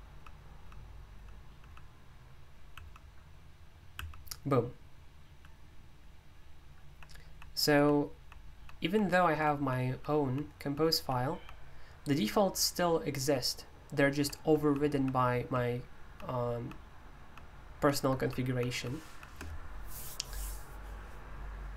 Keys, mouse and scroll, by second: 0.0-1.5 typing, 2.7 typing, 3.9 typing, 6.5-19.0 typing.